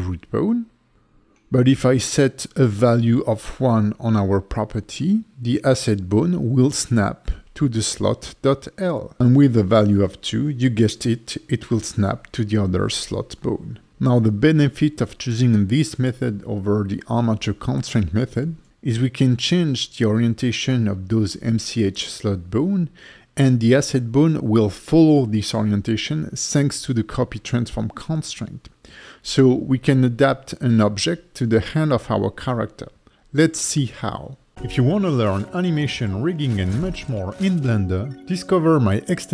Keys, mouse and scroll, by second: 0.2 click, 2.1 click, 3.4 click, 4.1 click, 4.6 click, 5.2 click, 5.8 g, 6.6 right click, 7.5 click, 8.4 click, 9.4 click, 9.5 click, 10.0 click, 10.7 g, 11.4 right click, 11.9 alt+middle click, 12.8 click, 13.3 click, 14.9 click, 15.9 click, 16.5-16.8 scroll up 3, 16.9 alt+middle click, 17.8 click, 18.0 click, 18.6 middle click, 18.9 Tab, 19.1 alt+middle click, 20.2 r, 20.5 x, 21.4 click, 21.9 alt+middle click, 22.5 ctrl+c, 22.8 ctrl+shift+v, 23.4 alt+middle click, 26.1 right click, 28.2 Tab, 28.6 scroll down 1, 29.5 click, 30.4 click, 31.4 alt+middle click, 33.0 click, 33.6 alt+middle click, 34.3 click.